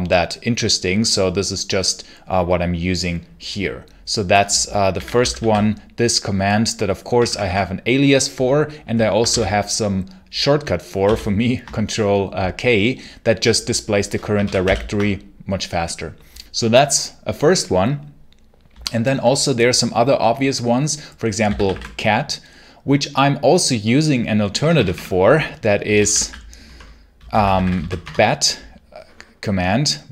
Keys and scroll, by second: 4.5-5.7 typing, 6.9 BackSpace, 7.3 BackSpace, 9.1 ctrl+k, 10.9 ctrl+k, 14.3 ctrl+l, 14.5 ctrl+k, 21.1-22.0 typing, 24.4 BackSpace, 25.5-28.0 typing.